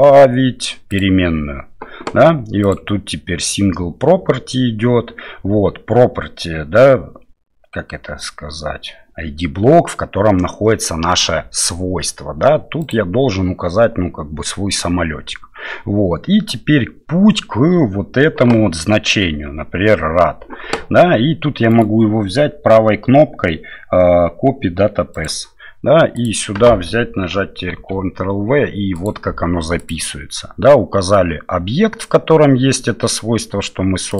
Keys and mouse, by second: 0.9 click, 2.6-3.9 drag, 12.9 click, 21.7-25.2 right drag, 26.3-29.1 drag, 29.9-34.1 drag.